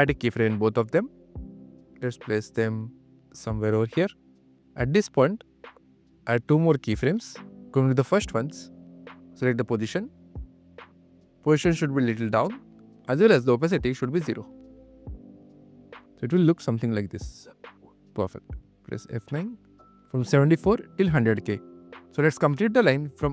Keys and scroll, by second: 16.6 space, 17.1 q, 18.9 F9, 19.3 q.